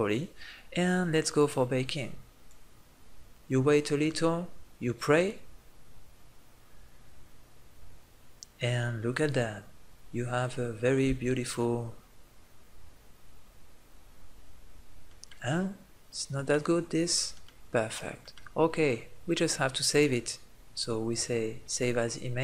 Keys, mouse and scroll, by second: 11.0 Tab, 19.9-22.4 drag.